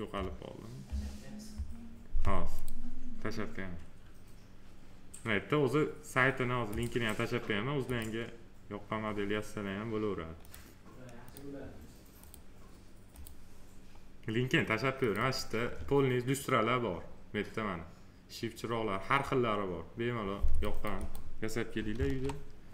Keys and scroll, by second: 21.9 ctrl+a.